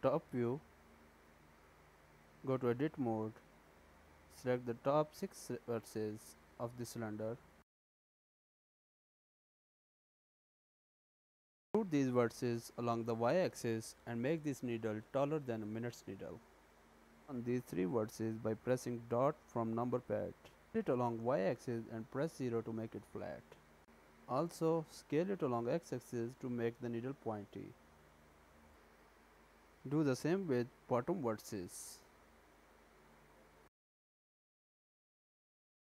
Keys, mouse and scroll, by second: 0.9 click, 2.1 Tab, 2.7 1, 3.4 click, 4.6 middle click, 7.9 click, 8.6-8.9 scroll down 2, 9.2 shift+middle click, 10.5-11.6 scroll down 5, 12.1 shift+middle click, 12.6 e, 17.4 shift+middle click, 18.1 shift+middle click, 18.7 shift+scroll down 1, 19.2 KP_Decimal, 20.1-21.0 scroll down 5, 21.0 scroll down 2, 21.0 s, 24.0 s, 27.6-28.7 scroll down 13, 28.7 shift+middle click, 29.9-31.4 scroll up 7, 31.7 click, 33.7 e.